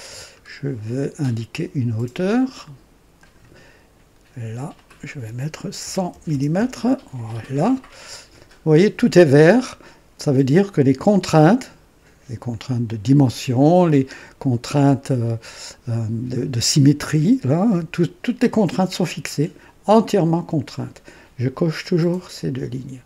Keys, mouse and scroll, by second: 0.3-0.6 scroll down 2, 1.0-1.3 scroll down 1, 3.1 click, 4.7 click, 5.8-6.5 typing, 12.4-13.3 drag.